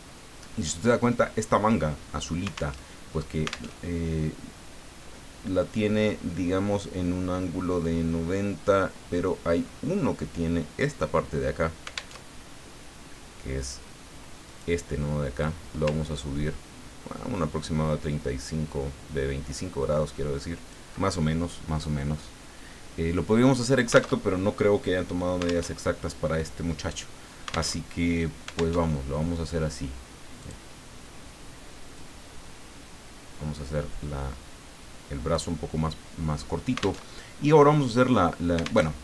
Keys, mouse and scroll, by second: 2.7 alt+Tab, 3.8 alt+Tab, 12.1 alt+Tab, 14.5 click, 15.4-20.9 drag, 24.1 alt+Tab, 25.7 alt+Tab, 27.8 alt+Tab, 28.8 alt+Tab, 30.4 click, 32.0-35.6 drag, 37.1 alt+Tab, 38.8 alt+Tab.